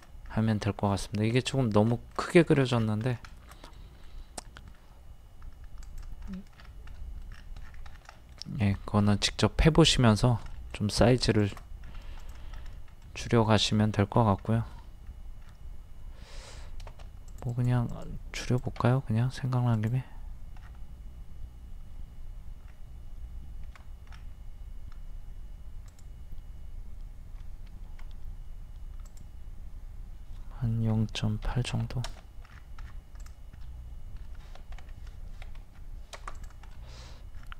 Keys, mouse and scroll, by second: 0.3-0.6 scroll up 1, 1.3 click, 2.1 scroll down 1, 3.3-3.7 shift+scroll up 1, 9.2-9.7 scroll up 1, 10.5 shift+middle click, 11.0 scroll up 1, 11.4 shift+click, 11.8-12.2 scroll up 1, 12.2 click, 12.5-12.9 scroll up 1, 13.0 middle click, 13.7-14.2 scroll down 1, 14.5 middle click, 15.1-15.4 scroll up 1, 15.4 scroll down 1, 16.4-16.9 scroll up 1, 17.3 click, 18.8 click, 19.8 click, 20.6 scroll down 1, 20.7-21.2 scroll up 1, 23.6 Escape, 24.1-24.4 scroll up 1, 25.9 click, 27.8 Escape, 29.1 click, 30.9 KP_0, 31.1 KP_Decimal, 31.5 KP_8, 32.5 scroll down 1, 33.2 click, 33.6 middle click, 34.8 ctrl+z, 35.6 ctrl+z, 36.3 click, 36.7 middle click, 37.4-37.5 scroll down 1.